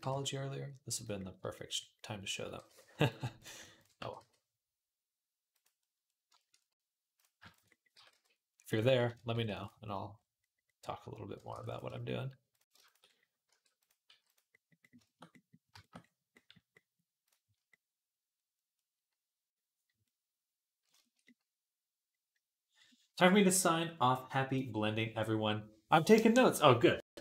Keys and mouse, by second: 2.2 g, 3.2 click, 3.4-12.7 middle drag, 3.4 shift+a, 3.8 g, 7.7 g, 9.1 ctrl+r, 11.3 ctrl+r, 12.6 shift+a, 12.7 shift+click, 12.8-27.2 alt+middle drag, 13.3 r, 13.9 g.